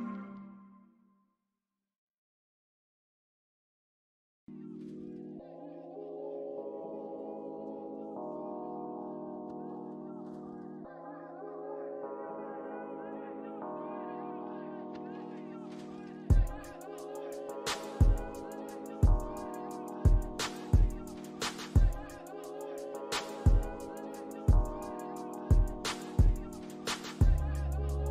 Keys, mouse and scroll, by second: 0.1 alt+middle click, 0.5 alt+click, 2.7 alt+click, 3.3 alt+middle click, 3.9 alt+click, 4.5 alt+middle click, 4.9 scroll up 1, 5.9 alt+click, 11.3 scroll up 1, 11.7 alt+click, 13.2 alt+click, 13.6 scroll down 1, 15.7 alt+middle click, 16.1 alt+scroll down 1, 16.4 alt+click, 18.3 middle click, 18.9 scroll down 1, 19.9 alt+middle click, 20.4 scroll down 1, 20.8 ctrl+click, 22.6 ctrl+scroll up 1, 23.2 ctrl+click, 24.1 ctrl+scroll down 1, 25.3 alt+middle click, 26.7 scroll up 1, 27.1 alt+middle click.